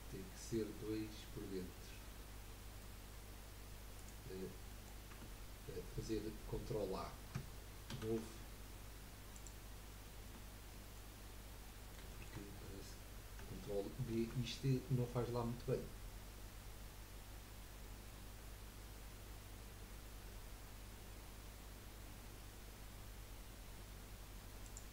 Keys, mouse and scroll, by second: 4.4 scroll down 4, 4.7 middle click, 5.1 Tab, 7.9 ctrl+a, 9.8-10.2 scroll up 2, 10.2 Tab, 10.7 middle click, 11.2-11.5 scroll up 3, 11.6-12.7 middle drag, 12.7 scroll up 1, 14.1 ctrl+b.